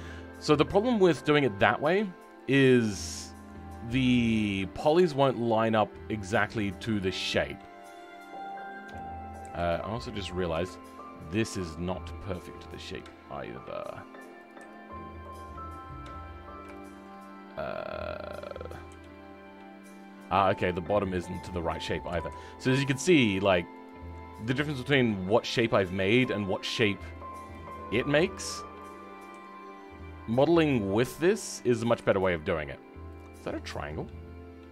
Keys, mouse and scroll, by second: 8.8 KP_3, 9.4 KP_1, 9.9-10.5 scroll up 3, 10.5 shift+middle click, 11.5 click, 16.7-18.8 shift+middle drag, 18.8 KP_3, 21.3 click, 22.1 g, 26.7 shift+middle click, 27.4 click, 31.9 g, 33.2 scroll down 2, 33.5 middle click.